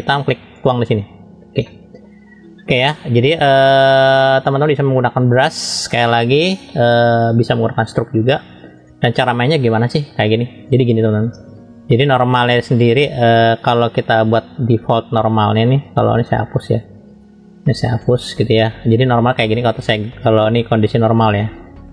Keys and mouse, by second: 0.6 click, 1.8 middle click, 3.6 middle click, 4.2 shift+middle click, 5.4 click, 6.2 middle click, 8.8-19.4 drag, 21.3-21.9 drag.